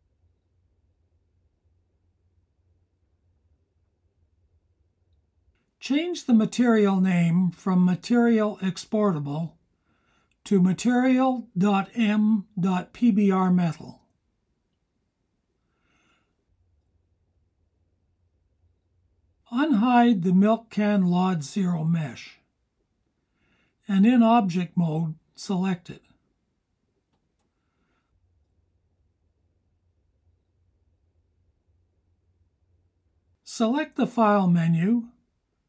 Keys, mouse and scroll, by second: 2.2-3.7 drag, 5.4-16.1 drag, 21.6 click, 22.9 click, 26.2-29.7 drag, 31.6 click.